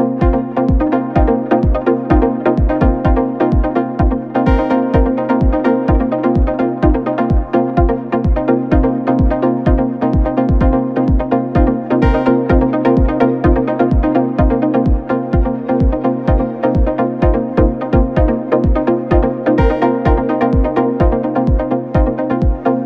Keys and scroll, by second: 0.8 Delete, 2.9 3, 15.8 f, 20.4 4, 21.4 1, 22.3 F1.